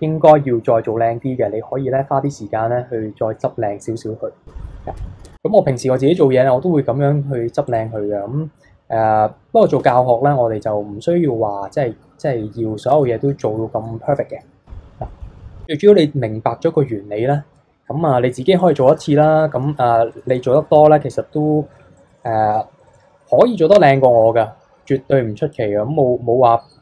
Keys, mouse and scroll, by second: 5.3 KP_3, 5.7 scroll down 1, 5.9 shift+middle drag, 7.6 click, 8.5-9.8 scroll down 2, 9.8 Tab, 10.6-12.9 middle drag, 12.9 KP_3, 14.8 scroll up 1, 15.1 middle click, 15.6-16.3 scroll down 2, 16.3-18.1 scroll up 1, 18.6 alt+click, 19.6 s, 22.1 alt+click, 22.8-24.8 middle drag, 24.8 s.